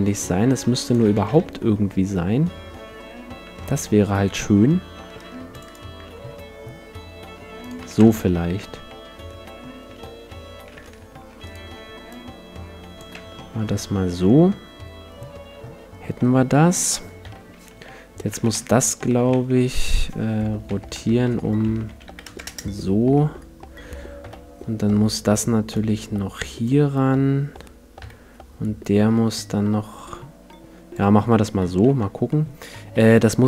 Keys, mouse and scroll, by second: 1.1 a, 1.3 Tab, 1.3 middle click, 3.4 Tab, 5.1 ctrl+r, 5.7-7.4 right drag, 6.0 s, 7.7-9.4 drag, 7.8 a, 8.0 Tab, 8.2-10.1 middle drag, 9.9 Tab, 11.5-13.3 right drag, 12.1-14.0 drag, 13.1 Tab, 13.8-15.0 middle drag, 16.1-17.3 middle drag, 17.2 KP_1, 17.7 Tab, 18.3 a, 18.5 a, 19.1 r, 19.3 x, 20.7 r, 23.1-25.7 middle drag, 24.2 KP_1, 25.7-27.5 drag, 28.0 KP_3, 29.3-31.2 drag, 31.3-33.1 middle drag, 31.9 Tab, 33.1 n.